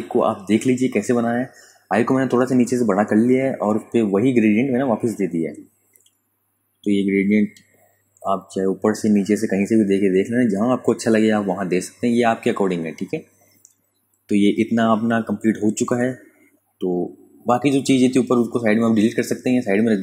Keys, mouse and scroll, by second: 0.2 typing, 2.1 click, 4.7 click, 15.1 v, 15.4 click, 16.8 ctrl+alt+click, 19.5 Delete.